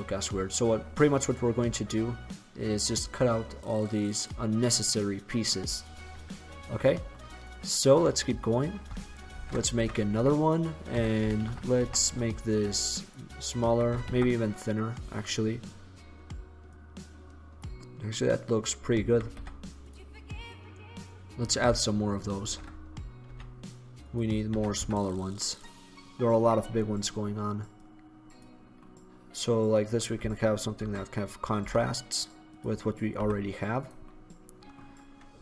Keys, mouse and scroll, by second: 5.2 middle click, 7.5-8.2 right drag, 9.4 shift+d, 11.0 s, 13.3 drag, 13.8 s, 15.1-15.6 drag, 17.2 click, 18.0-18.6 drag, 19.2 r, 22.6 shift+d, 24.7 s, 27.0-29.0 drag, 29.8 right click, 30.7 shift+d, 32.7 click, 33.3 s, 34.3-35.4 drag.